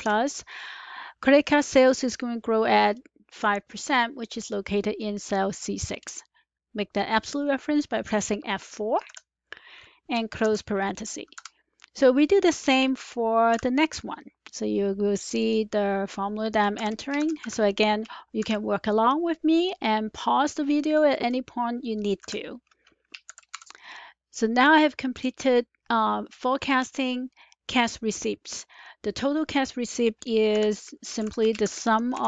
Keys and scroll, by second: 0.0-0.4 typing, 9.0 F4, 10.3 typing, 11.3 Return, 13.2-13.9 typing, 16.2-18.3 typing, 22.1 F4, 23.0-23.7 typing, 30.4-32.2 typing.